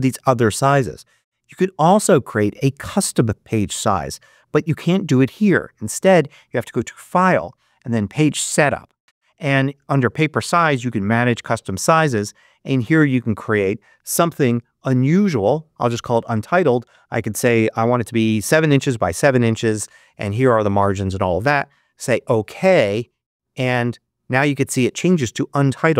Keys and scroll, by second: 17.4 7, 19.3 Tab.